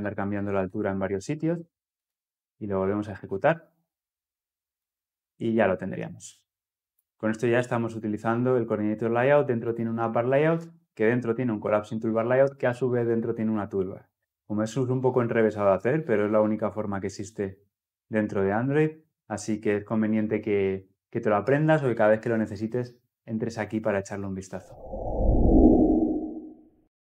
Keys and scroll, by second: 1.8 ctrl+F10.